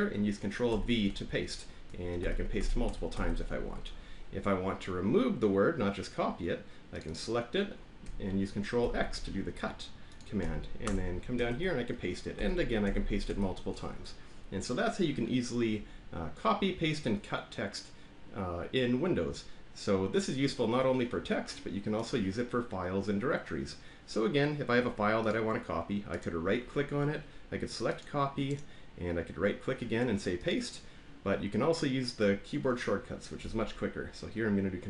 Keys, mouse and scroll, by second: 2.8 ctrl+v, 3.1 ctrl+v, 7.0 click, 7.1 click, 8.8 ctrl+x, 10.1 click, 10.8 Return, 11.4 ctrl+v, 12.3 ctrl+v, 12.8 ctrl+v, 13.2 ctrl+v, 25.2 click, 26.2 right click, 28.0 click, 28.5 right click, 30.4 click.